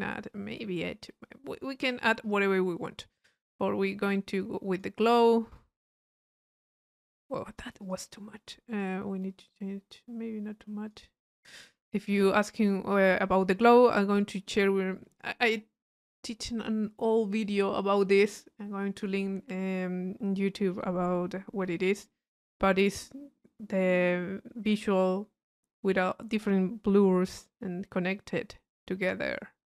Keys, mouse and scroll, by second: 1.9 click, 2.4 middle click, 3.4-5.1 drag, 5.6-8.2 drag, 8.8-11.5 drag, 11.6-14.6 middle drag, 21.2-23.4 middle drag, 26.7 middle click, 29.4-29.6 drag.